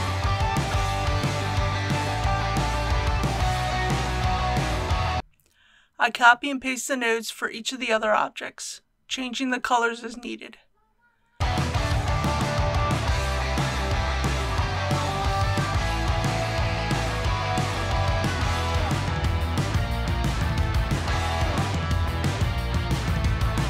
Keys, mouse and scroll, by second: 10.6 ctrl+c, 13.3 click, 15.8 Return, 16.9 click, 17.9 typing, 18.4 ctrl+v, 18.4 click, 19.2 Return, 19.3 click, 19.3 ctrl+v, 19.5 click, 20.2 ctrl+c, 20.4 click, 20.4 Return, 20.5 click, 20.5 ctrl+v, 20.6 click, 20.8 Tab, 21.1 click, 21.4 Return, 21.5 click, 21.6 ctrl+v, 22.0 3, 22.2 alt+shift+click, 22.3 ctrl+z, 22.4 click, 22.6 middle click, 22.8 middle click, 23.1 scroll down 1, 23.3 alt+click.